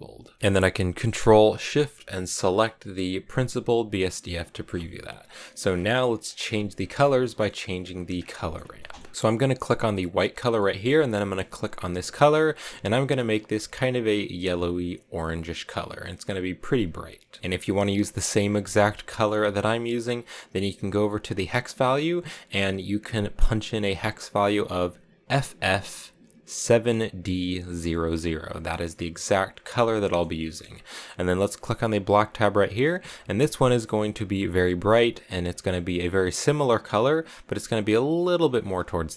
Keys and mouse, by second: 2.4 ctrl+shift+click, 5.4 middle click, 6.2 click, 6.9 click, 7.2 middle click, 9.9 click, 10.4 middle click, 11.7 click, 19.0 middle click, 19.4 click, 22.1 click, 30.0 middle click, 30.4 middle click, 32.0 click, 33.1 click.